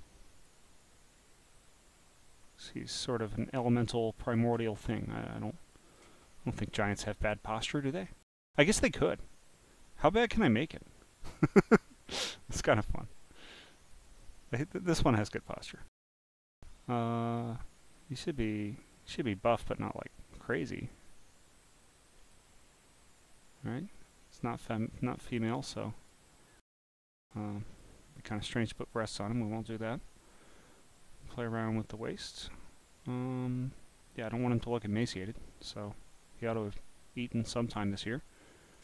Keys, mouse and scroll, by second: 0.8-3.4 drag, 3.7 scroll down 1, 4.1 click, 5.0 scroll, 5.0 scroll, 5.0 scroll, 5.3 scroll, 5.4 scroll, 5.4 scroll, 5.7 click, 6.2 scroll down 3, 6.7 scroll up 2, 9.8-13.9 drag, 14.0 click, 14.6 click, 17.4-20.6 drag, 20.9 click, 24.1 click, 25.8 click, 27.5 click, 28.2 click, 30.6 click, 38.4 click.